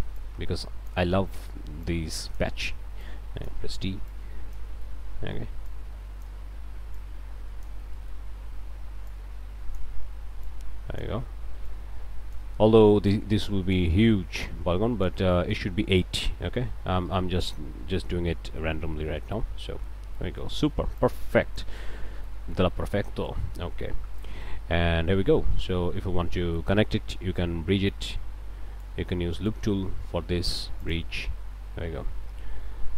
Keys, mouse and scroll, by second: 0.2 click, 1.9 click, 3.0 click, 4.1 click, 4.8 click, 5.7 click, 6.9 click, 7.9 click, 9.1 click, 10.5 click, 11.7 click, 13.1 click, 14.4 click, 15.3 click, 16.9 q, 17.5 click, 19.3 click, 20.2 click, 21.0 click, 21.8 Tab, 22.3 click, 22.8 scroll down 2, 23.4 Tab, 23.6-24.1 scroll up 2, 24.2 click, 24.6 a, 27.9-29.0 ctrl+drag, 29.3 click, 30.8 click.